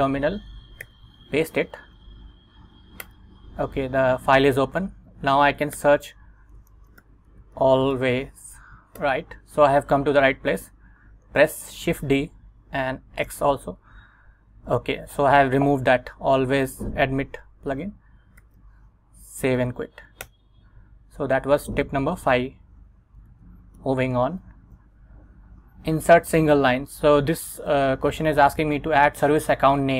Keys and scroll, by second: 0.9 super+v, 1.9 Up, 3.1 Return, 5.9-8.5 typing, 9.1 Return, 11.9 shift+d, 13.4 x, 14.6 Escape, 18.5 shift+;, 19.6 x, 20.3 Return, 22.6 super+Tab, 23.4 super+Tab, 23.9 Return, 24.7 Right.